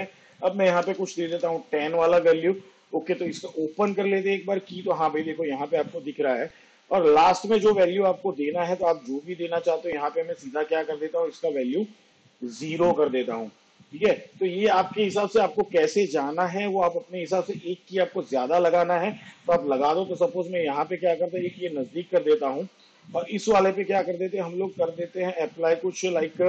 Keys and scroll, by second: 0.9 2, 4.1 u, 11.8 0.